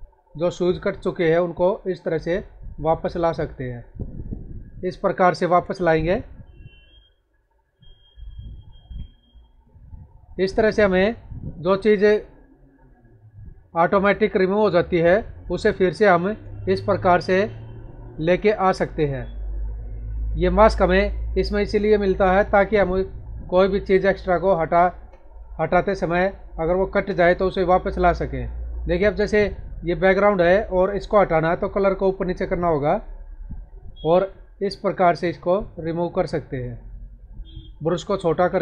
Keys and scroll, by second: 4.2 space, 8.1 space, 15.4 space, 20.2 ctrl+-, 26.4 space.